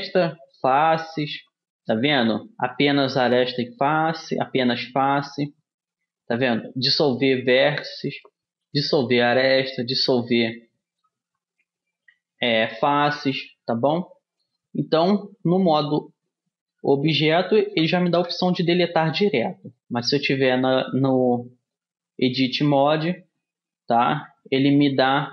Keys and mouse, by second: 15.9 Tab, 18.3 Delete, 20.1 Tab, 25.2 Delete.